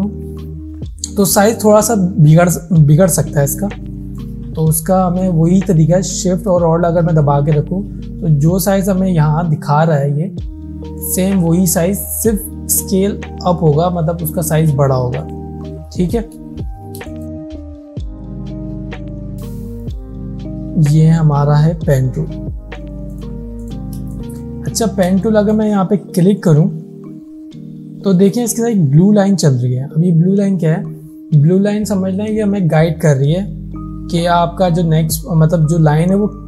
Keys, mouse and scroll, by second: 4.7 ctrl+z, 10.9 ctrl+z, 11.0-15.3 alt+drag, 15.9 alt+scroll down 1, 16.6 alt+scroll down 2, 17.1 space, 17.1-19.9 drag, 17.9-18.2 click, 23.1 right click, 23.6 click, 24.1 space, 24.2 click, 24.7 alt+scroll up 1, 25.2 space, 25.3 click.